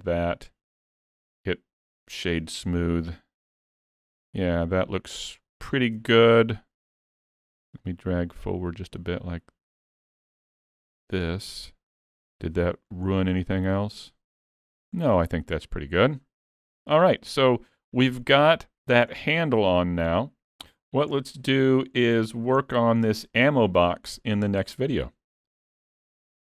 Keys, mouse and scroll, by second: 1.2 click, 2.9 middle click, 4.1 alt+a, 4.3-5.0 scroll up 3, 5.0 middle click, 5.0-5.4 scroll up 1, 5.4 scroll down 3, 5.7 shift+middle click, 6.3 click, 7.9 click, 11.7 scroll down 2, 11.9 middle click, 13.1 scroll up 5, 13.4 middle click, 14.2-14.6 scroll down 2, 14.6 alt+a, 15.0-15.3 scroll up 1, 15.3 middle click, 16.3-16.7 scroll down 2, 16.7 middle click, 19.2 scroll down 1, 19.5 middle click, 21.3-22.1 scroll down 4, 22.1-22.6 scroll down 5, 22.6 shift+middle click.